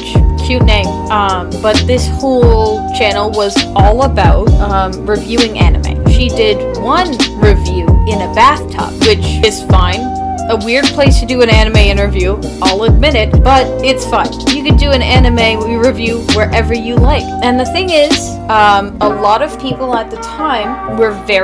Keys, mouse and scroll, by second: 0.0-0.5 typing.